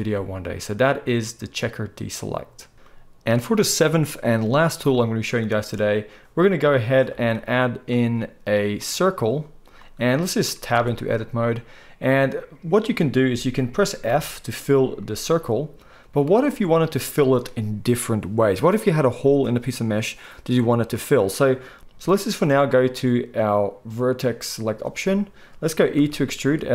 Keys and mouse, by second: 2.1-2.6 right drag, 7.1 shift+a, 8.8-9.4 right drag, 10.7 Tab, 11.2 click, 11.5-21.8 right drag, 14.1 f, 16.2 ctrl+z, 21.8-24.7 middle drag, 24.7-26.7 drag, 25.9 e.